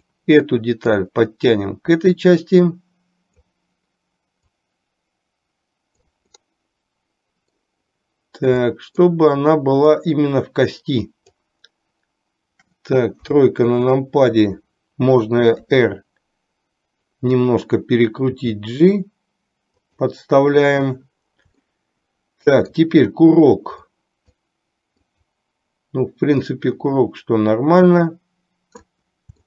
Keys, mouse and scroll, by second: 0.0 click, 1.0-3.6 drag, 4.6 click, 5.1-6.3 drag, 6.5-7.9 middle drag, 8.9 middle click, 10.0-11.8 drag, 13.3 KP_3, 15.8 r, 18.5 g, 21.8-23.0 shift+middle drag, 24.1 click, 25.3 click, 26.6-29.0 drag.